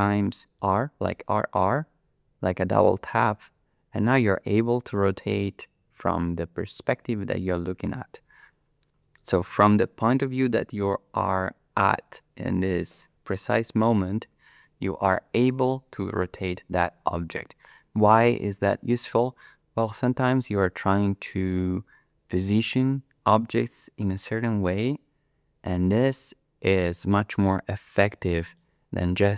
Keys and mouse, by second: 0.6 r, 1.1 r, 28.5 click.